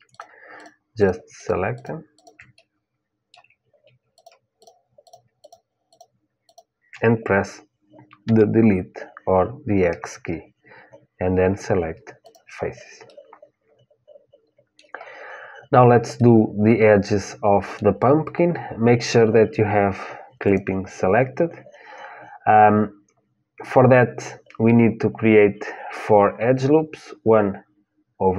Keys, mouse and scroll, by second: 2.3-4.3 middle drag, 8.0 Delete, 12.8-20.2 middle drag.